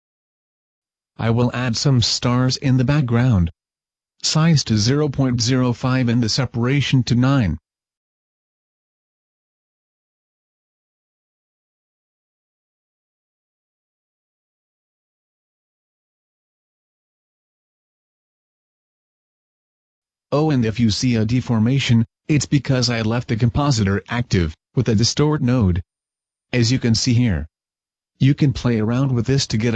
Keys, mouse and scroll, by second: 0.9 click, 1.7 click.